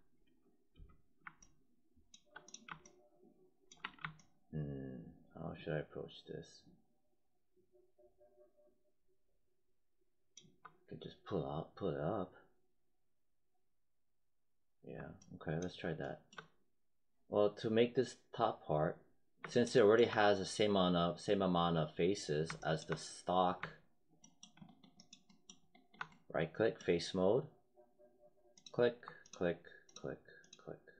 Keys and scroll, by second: 0.1 space, 3.7 w.